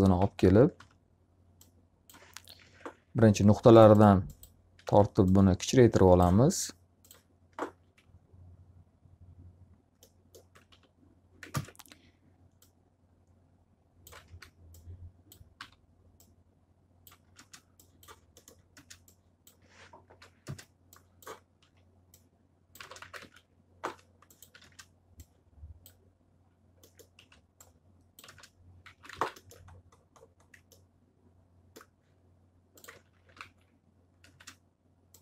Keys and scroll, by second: 0.7 e, 2.5 ctrl+z, 4.7 w, 7.7 z, 10.7 e, 11.4 ctrl+space, 14.1 w, 15.4 e, 17.1 w, 17.3 space, 19.9 ctrl+z, 20.3 space, 21.5 s, 22.7 space, 22.9 z, 23.1 alt+a, 23.7 1, 24.5 space, 27.1 s, 28.7 z, 29.0 alt+a, 32.9-34.2 typing.